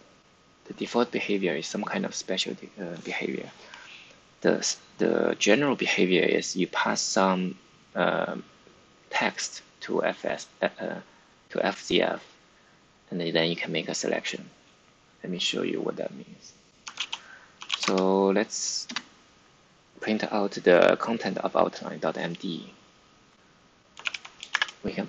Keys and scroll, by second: 16.8-18.1 typing, 18.8 Return, 23.9 Up, 24.4-25.0 typing.